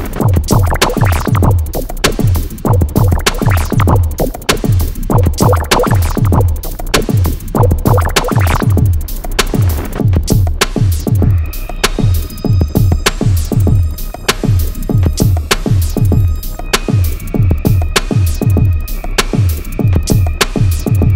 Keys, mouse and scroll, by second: 0.0 click, 3.2 middle click, 5.4 click, 7.4 Escape, 8.4 click, 8.6 d, 8.8 click, 9.2 1, 9.4 6, 9.9 Return, 10.9 Escape, 11.0 scroll up 1, 12.0 scroll down 1, 12.5 middle click, 13.1 scroll down 1, 13.9-14.7 scroll up 1, 14.8 middle click, 15.6 scroll down 1, 16.0-16.5 scroll up 1, 18.2 middle click, 19.0 scroll down 1, 20.8 e.